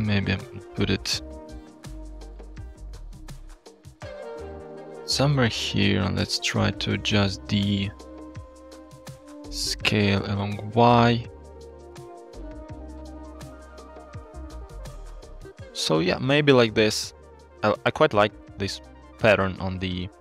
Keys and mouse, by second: 6.0-7.1 shift+drag, 7.6-10.8 shift+drag, 11.5-15.9 shift+drag, 17.6-18.2 shift+drag, 18.7 shift+click.